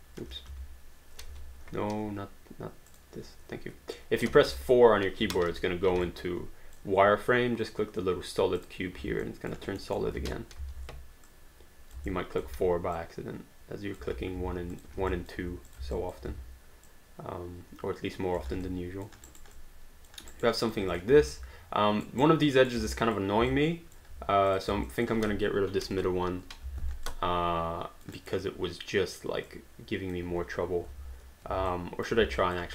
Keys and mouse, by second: 0.0-1.3 typing, 2.9 click, 4.5 4, 6.1 alt+click, 8.6 click, 9.2 alt+click, 9.8 alt+middle click, 10.6 r, 11.3 click, 12.1 alt+click, 12.5 w, 13.0 click, 14.7 click, 14.9 q, 15.1 alt+click, 15.7 shift+click, 15.9 alt+click, 16.3 w, 16.9 click, 18.6 alt+d, 18.7 alt+click, 19.3 alt+right click, 19.5 alt+click, 20.3 alt+right click, 20.6 alt+click, 20.9 click, 21.3 alt+right click, 21.5 right click, 22.9 alt+click, 23.5 alt+click, 24.5 click, 24.9 alt+click, 26.0 ctrl+Delete, 27.1 alt+click, 28.2 alt+right click, 28.5 alt+click, 29.6 alt+click, 31.0 ctrl+z, 31.7 alt+click, 32.4 alt+click.